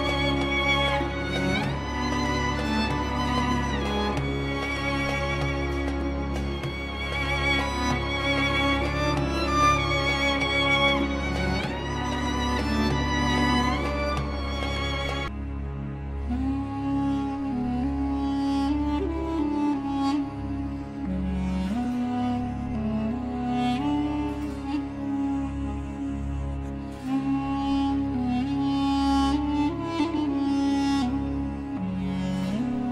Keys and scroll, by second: 2.0 c, 2.3 e, 2.9 shift+F2, 3.1 Escape, 4.2 shift+Page_Down, 4.7 ctrl+Page_Up, 7.8 F3, 10.0 shift+Page_Up, 10.8 Escape, 16.2 F4.